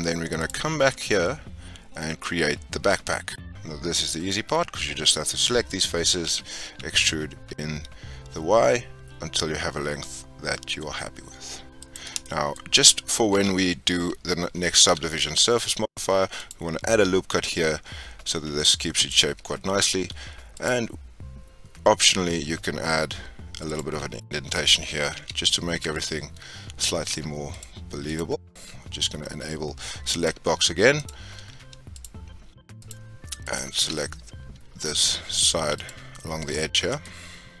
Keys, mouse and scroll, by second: 0.3 click, 1.0-1.4 scroll up 2, 2.2-4.1 drag, 4.1 scroll down 1, 4.2-6.2 middle drag, 6.2 e, 12.2 shift+middle click, 12.5-13.3 scroll up 2, 13.3 2, 14.8 ctrl+r, 19.9 ctrl+r, 24.0-24.5 scroll up 5, 25.1 2, 25.9 alt+click, 26.5-26.9 scroll down 3, 27.5 alt+click, 28.0 alt+click, 29.0-31.0 drag, 31.9 alt+shift+click, 32.7 alt+shift+click, 33.4 alt+shift+click, 33.9 scroll down 1, 33.9-35.7 middle drag, 35.7 alt+shift+click, 36.5-37.6 middle drag.